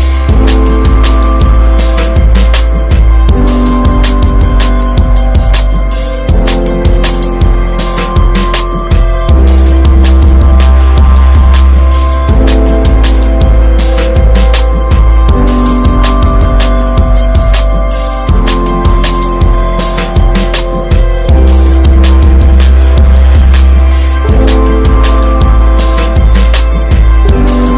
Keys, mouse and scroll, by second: 0.4 click, 0.6 scroll down 2, 0.8-1.3 shift+middle drag, 1.3 ctrl+s, 1.4 click, 1.9 alt+middle click, 2.0 alt+scroll up 1, 2.1 ctrl+s, 2.2 click, 2.5 shift+middle click, 2.8 shift+scroll up 1, 3.2 Tab, 3.3 middle click, 3.6 scroll up 1, 3.9 shift+middle click, 4.8 click, 5.4 ctrl+s, 5.5 click, 5.8 middle click, 6.0 ctrl+scroll up 1, 6.1 ctrl+s, 6.4 middle click, 6.6 click, 7.3 shift+a, 8.8 alt+middle click, 9.6 ctrl+s, 9.9-10.4 drag, 10.5 alt+z, 10.7-11.4 scroll up 3, 11.1 shift+middle click, 11.4 alt+middle click, 12.1 s, 14.9 alt+middle click, 15.3 ctrl+s, 15.8 click, 17.0-17.7 drag, 17.7 s, 19.3 ctrl+a, 20.2-21.5 right drag, 21.5-22.8 scroll up 1, 22.8 alt+middle click, 23.6-24.3 shift+middle drag, 24.3 alt+z, 25.1 3, 25.2 click, 25.7 click, 26.0 Tab, 26.2 click, 26.5 3, 26.7 click, 27.6 s.